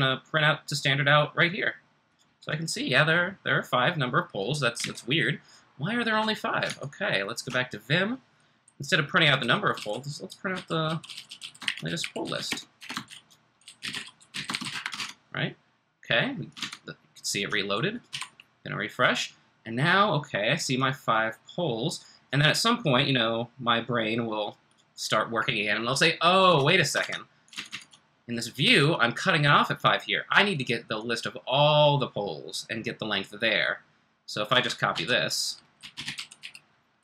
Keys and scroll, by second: 4.8 super+Tab, 6.6 super+Tab, 9.4-18.0 typing, 27.0 super+Tab, 27.5 super+Tab, 27.7 super+Tab, 34.9 super+c, 35.5-37.0 typing.